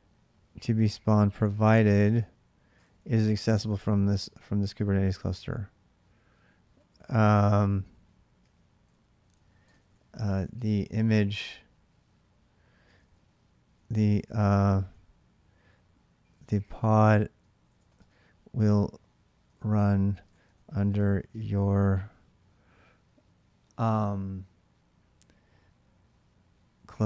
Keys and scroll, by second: 0.4-2.3 typing, 2.5 ctrl+[, 2.6 ctrl+j, 4.4-21.5 typing, 8.2 ctrl+[, 26.3-27.0 typing.